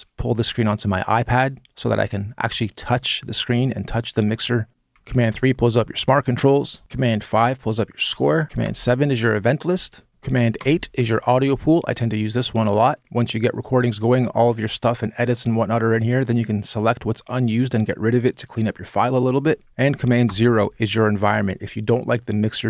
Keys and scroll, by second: 4.9 super+3, 6.3 super+5, 7.8 super+6, 8.5 super+7, 10.0 super+8, 10.3 super+8, 20.0 super+0.